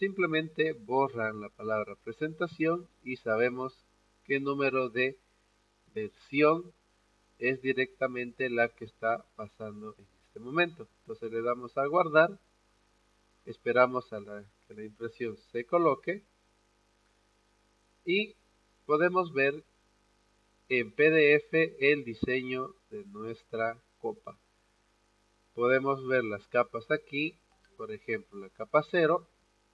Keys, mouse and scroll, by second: 0.1 click, 1.3 click, 2.4-4.5 drag, 11.8 click, 18.3-19.8 drag, 26.0 click.